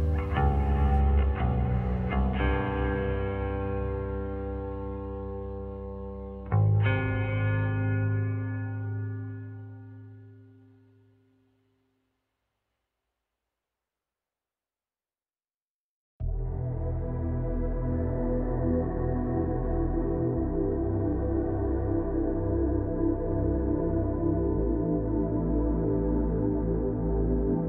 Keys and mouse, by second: 0.2 Tab, 1.4 s, 2.7 Tab, 3.6 g, 5.5 click, 9.1 Tab, 10.3 x, 11.8 Tab, 12.4 click, 12.7-13.7 drag, 15.5 click, 18.1 click, 19.1 shift+d, 24.1 ctrl+z, 25.1 g, 26.8 shift+d.